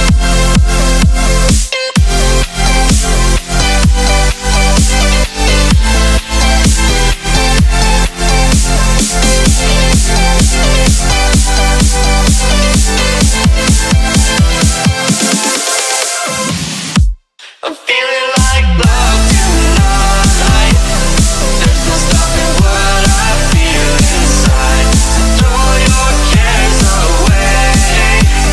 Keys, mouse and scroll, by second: 0.7 click, 2.5-3.9 typing, 5.0 click, 7.1-8.3 typing, 9.0 Tab, 9.1 F10, 9.5 click, 11.9-13.0 typing, 13.6 click, 18.2-20.1 typing, 20.9 click, 22.8 F10, 23.7 click, 25.4-25.7 typing, 25.9 Return, 26.6 click, 28.0 right click.